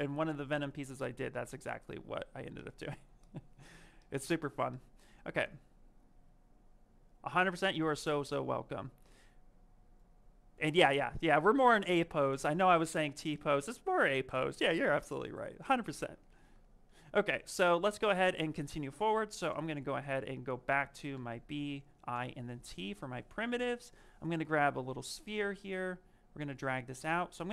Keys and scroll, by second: 19.3 b, 22.0 t.